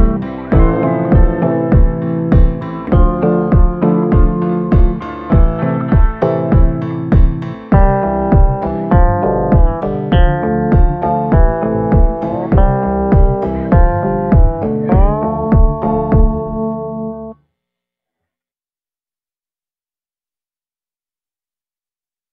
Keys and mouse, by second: 0.1 click, 0.6 click, 1.0 click, 1.5 ctrl+z, 1.6 ctrl+z, 1.9 ctrl+z, 2.2 ctrl+z, 2.5 ctrl+z, 3.0 click, 3.9 click, 4.3 click, 4.7 click, 5.3 ctrl+z, 6.5 click, 10.8-13.7 drag, 13.7 shift+b, 14.5 click, 15.1 click.